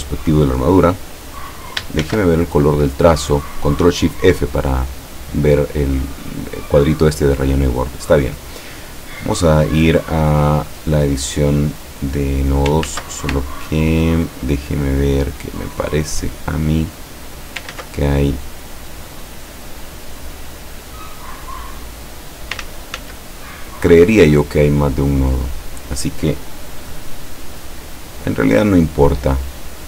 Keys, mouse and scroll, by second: 2.1 ctrl+shift+f, 3.4 click, 7.3 click, 9.0 click, 9.9 click, 11.7 click, 12.9 ctrl+z, 13.6-14.3 ctrl+scroll up 4, 15.2 click, 16.8 click, 17.8 ctrl+z, 18.3 ctrl+click, 19.3 click, 20.6-22.6 drag, 22.6 ctrl+z, 25.0 click, 25.7 click, 26.8 click, 28.2 click.